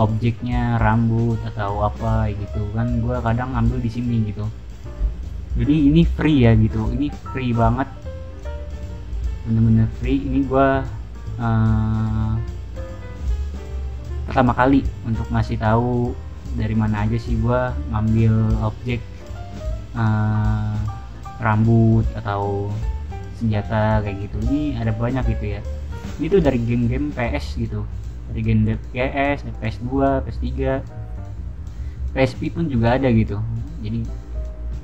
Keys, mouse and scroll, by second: 1.4-4.4 scroll down 1, 8.3 click, 8.8-10.9 scroll down 2, 14.4 scroll down 2, 17.1-18.8 scroll down 2, 18.8-21.9 scroll down 1, 24.5-25.7 scroll down 2, 25.7-27.7 scroll down 1, 27.7-29.1 scroll down 1, 29.1-31.0 scroll down 1, 31.0-33.7 scroll down 1, 34.3-34.8 scroll down 2, 34.5 a.